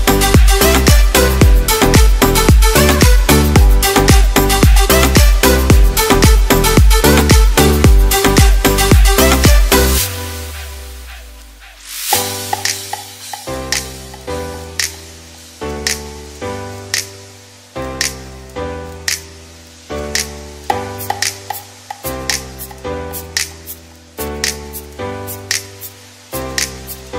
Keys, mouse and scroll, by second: 1.7 click, 6.4 click, 8.1 click, 17.9 click, 19.2-20.3 scroll down 11, 20.3 middle click, 22.2-23.7 scroll up 17, 23.1 middle click, 23.7 middle click, 26.6 click.